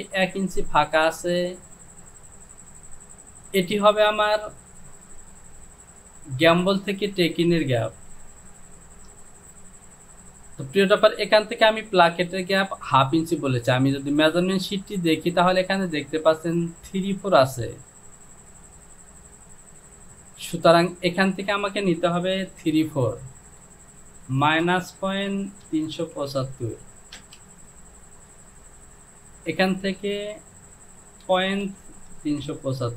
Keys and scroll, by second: 8.9 ctrl+z, 24.5 KP_Subtract, 25.1 KP_Decimal, 25.7 KP_3, 26.1 KP_7, 26.4 KP_5, 27.2 Return, 29.6 Down, 31.3 KP_Decimal, 31.7 KP_3, 32.1 KP_7, 32.5 KP_5.